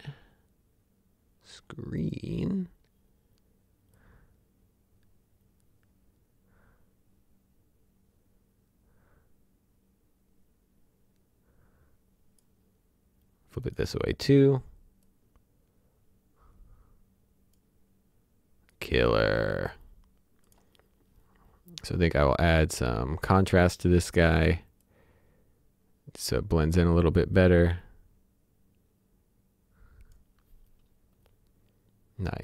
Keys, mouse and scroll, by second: 2.0 click, 4.1 click, 21.2 click, 22.6 click, 24.8 click.